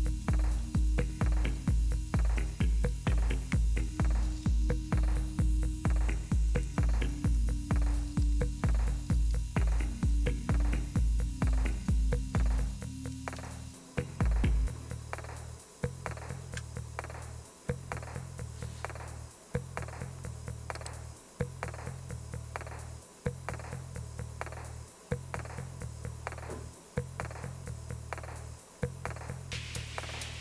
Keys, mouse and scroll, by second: 20.8 click, 21.2 click.